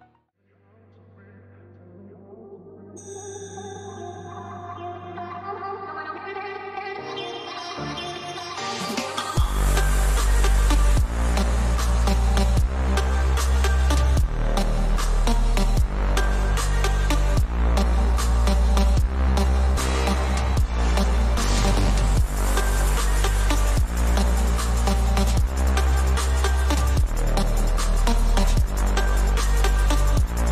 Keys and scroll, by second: 0.1 [, 5.1 ], 15.6 ctrl+alt+z, 16.3 ], 17.2 ], 17.3 [, 17.5 ], 19.0 ], 21.3 [, 26.6 ctrl+-, 26.8 ctrl+-, 27.1 ctrl+-.